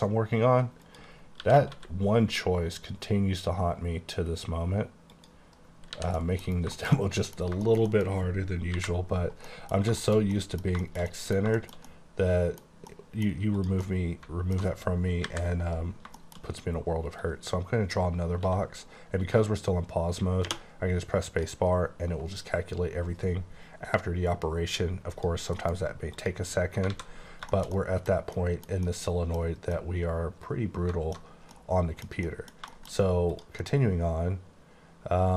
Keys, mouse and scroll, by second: 0.9 click, 1.5-1.8 typing, 5.2 click, 5.8 scroll down 2, 6.0 h, 6.3 middle click, 6.8 shift+middle click, 7.0 shift+double middle click, 7.4 scroll down 2, 7.7 shift+scroll up 1, 7.7 shift+middle click, 8.0 scroll down 1, 8.8 KP_5, 9.5 middle click, 9.9 shift+middle click, 10.3 middle click, 10.8 shift+middle click, 11.3 middle click, 11.6 middle click, 11.9 double middle click, 13.1 middle click, 13.6 click, 13.9 middle click, 15.3 KP_5, 15.9-16.6 scroll up 5, 16.2 shift+middle click, 17.3 click, 18.5 x, 20.5 space, 25.2 click, 25.6 alt+m, 26.2 click, 27.0 alt+a, 27.1-27.6 scroll down 6, 27.6 middle click, 27.8 double middle click, 28.4 middle click, 28.9 double middle click, 28.9 double middle click, 29.8 middle click, 31.6 middle click, 32.3 middle click, 32.3 middle click, 32.8 shift+middle click, 33.0 scroll up 1, 33.3 click, 33.8 middle click.